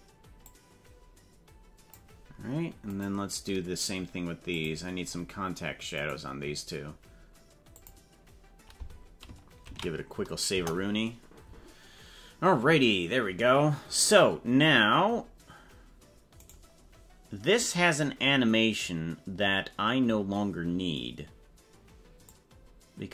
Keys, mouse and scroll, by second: 0.4-2.0 drag, 3.0 right click, 4.6 click, 6.0 right click, 7.7 click, 10.2 ctrl+s, 10.5 KP_0, 16.4 right click, 22.4-23.1 drag.